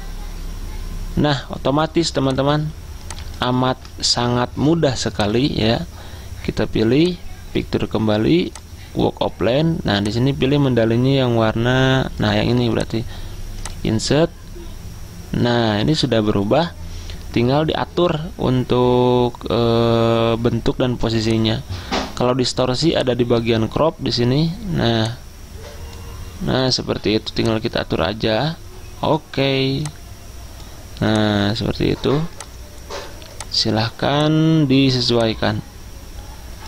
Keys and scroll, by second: 3.8 ctrl+z.